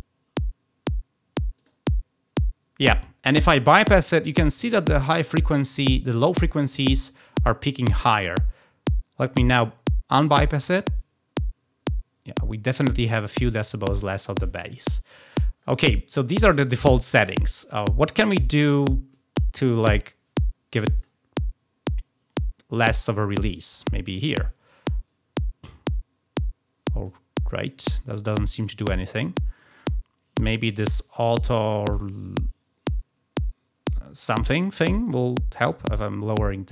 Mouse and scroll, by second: 1.5 click, 10.5 click, 15.0 click, 20.9 click, 24.5-27.0 drag, 28.5-29.6 drag, 35.6-36.7 drag.